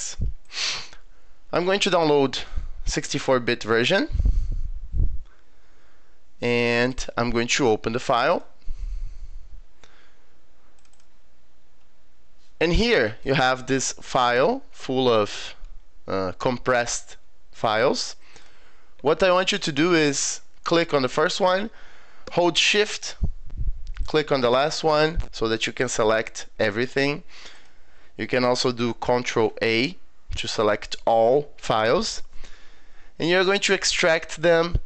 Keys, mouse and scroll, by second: 0.5 click, 3.8 click, 6.9 click, 8.3 click, 10.8 click, 10.9 click, 13.0 click, 14.4 scroll down 2, 14.7 scroll up 2, 17.6 click, 18.4 click, 24.0 shift+click, 27.5 click, 29.3 ctrl+a, 34.3 click.